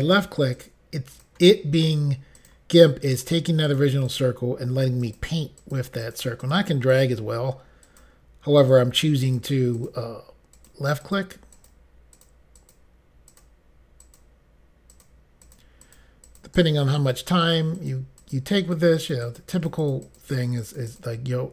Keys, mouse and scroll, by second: 0.0 click, 0.6 click, 1.2 click, 1.8 click, 2.4 click, 3.1 click, 3.7 click, 4.1 click, 4.2 double click, 5.1 double click, 5.6 double click, 6.1 click, 6.4 click, 6.6 double click, 7.0 click, 7.9 double click, 8.6 click, 9.3 click, 9.8 click, 10.6 click, 11.1 click, 11.6 click, 12.2 click, 12.6 click, 12.8 double click, 13.4 double click, 14.1 double click, 15.0 click, 15.5 click, 15.9 click, 16.3 click, 16.5 double click, 16.6 click, 17.1 click, 17.2 double click, 17.5 double click, 18.0 double click, 18.3 double click, 18.8 double click, 19.0 double click, 19.2 double click, 19.3 double click, 19.5 double click, 19.6 double click, 19.8 double click, 19.9 double click, 20.0 double click, 20.1 double click, 20.4 double click, 20.5 double click, 20.7 double click, 21.0 double click, 21.1 double click.